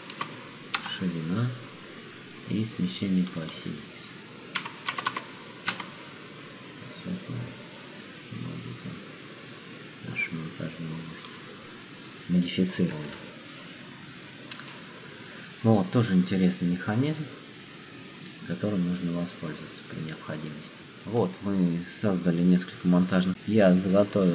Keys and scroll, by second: 0.0 0, 0.8 Return, 4.5 5, 5.0 0, 5.7 Return.